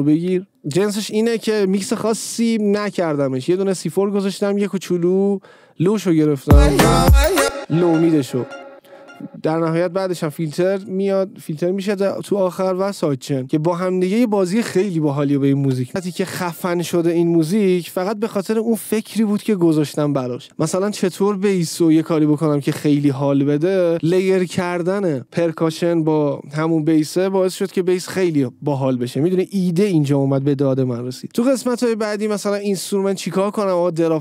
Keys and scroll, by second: 6.6 space.